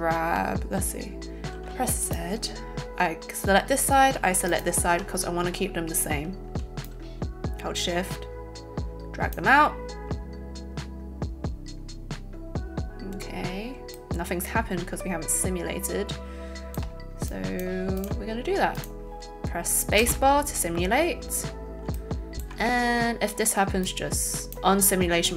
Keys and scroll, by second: 20.0 space.